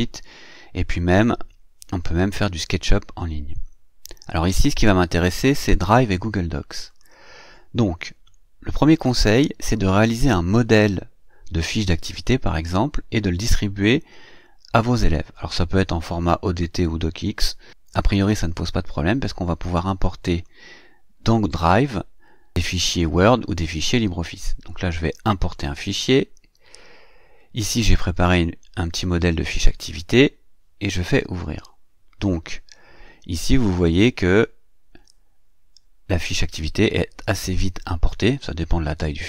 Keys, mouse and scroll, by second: 0.9-3.4 scroll down 2, 3.4-3.8 scroll up 2, 6.7 click, 20.1 click, 25.4 click, 31.1 click, 34.0 click.